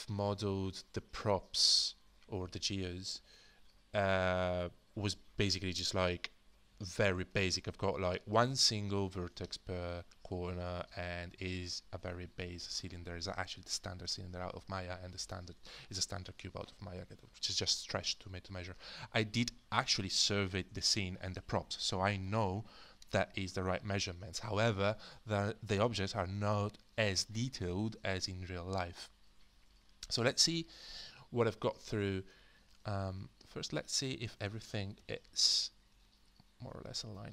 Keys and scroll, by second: 35.0 alt+f.